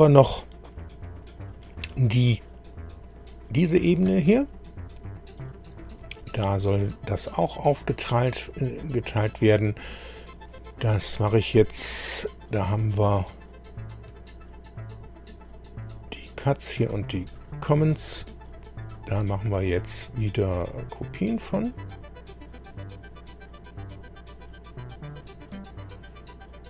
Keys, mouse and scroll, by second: 0.3 scroll up 2, 3.2 click, 4.1 space, 5.4 middle click, 6.2-8.1 middle drag, 8.9-9.3 scroll down 2, 9.6-10.0 scroll up 2, 12.7 click, 16.3 click, 16.7 click, 17.2 click, 18.0 shift+click, 18.8 shift+click, 20.6 click, 22.6-23.3 scroll down 2, 23.9 click.